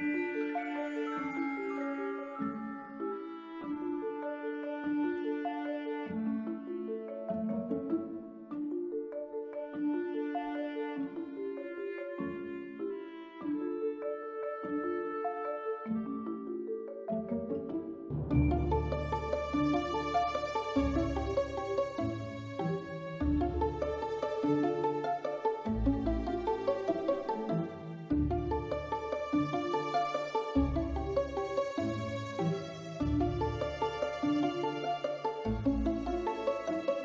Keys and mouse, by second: 0.1 1, 0.5 b, 1.4-2.5 drag, 2.8 Tab, 4.7 drag, 6.9 drag, 7.8 click, 9.5 click, 10.4 click, 11.0-12.3 middle drag, 12.9-13.3 ctrl+middle drag, 13.6 ctrl+s, 15.5-15.9 middle drag, 16.3 middle click, 16.8 shift+middle click, 19.1 drag, 25.7 shift+middle drag, 26.1-26.5 ctrl+middle drag, 26.8 shift+middle drag, 27.5 Tab, 28.3 1, 28.9 b, 30.2 s, 31.7 click, 32.4 click, 32.7 b, 33.6 click, 34.6-35.9 drag, 36.6 b.